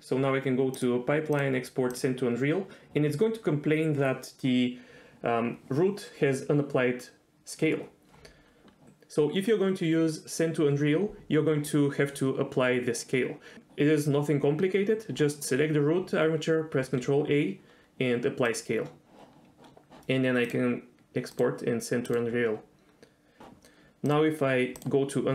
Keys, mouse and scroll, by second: 1.1-8.1 drag, 17.2 ctrl+a, 21.0-23.4 drag.